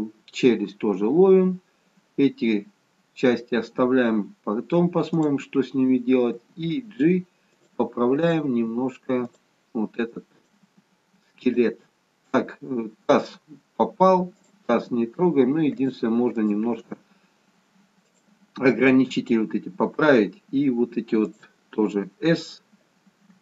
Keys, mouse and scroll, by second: 5.2 click, 6.3 g, 8.3 click, 8.7 g, 10.5 click, 10.8 g, 14.4 click, 14.7 g, 16.4 click, 16.7 g, 21.3 click.